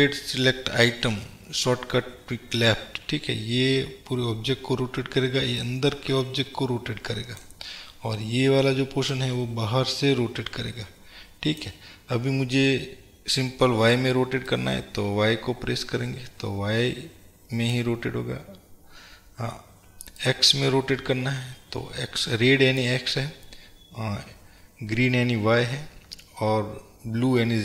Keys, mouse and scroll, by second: 5.8-27.6 drag, 7.7 scroll down 1.